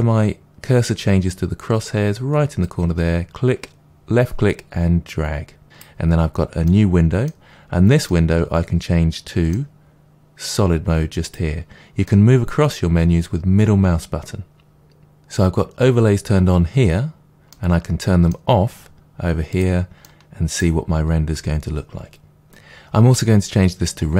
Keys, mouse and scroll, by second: 2.6-6.7 drag, 6.7-11.2 middle drag, 11.2 click, 12.0-19.5 middle drag, 19.5 click, 20.0 middle click, 20.9-21.8 scroll up 2, 21.8-22.4 scroll up 1, 22.4 click.